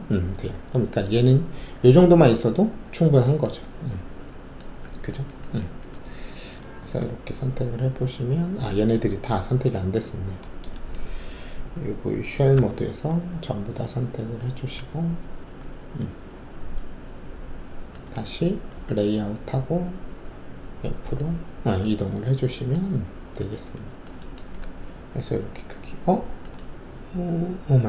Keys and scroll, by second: 4.8 alt+`, 12.5 alt+5, 18.7 alt+z.